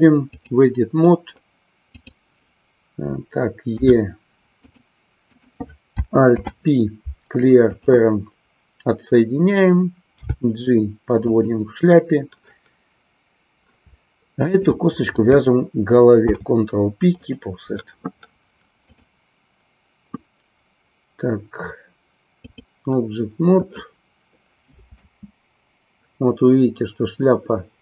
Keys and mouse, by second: 1.8 click, 4.7 click, 5.3 click, 6.2 alt+p, 11.3 click, 14.4 shift+click, 19.0-22.7 drag, 25.0 space.